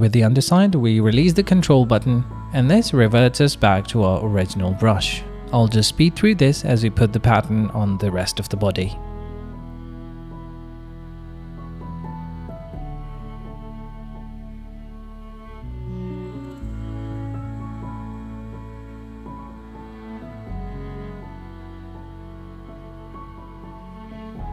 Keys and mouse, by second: 1.7 middle click, 2.8 click, 3.2 KP_7, 3.8 shift+middle click, 8.6 click, 9.9 shift+click, 10.8 shift+middle click, 13.2 click, 14.3 shift+middle click, 14.8 middle click, 15.3 middle click, 16.4 middle click, 17.1 click, 17.1 middle click, 17.1 right click, 18.2 click, 18.2 middle click, 18.2 right click, 18.5 click, 18.9 middle click, 19.0 click, 19.4 click, 20.0 middle click, 20.5 right click, 20.9 middle click, 21.4 middle click, 22.3 click, 22.8 click, 23.6 click.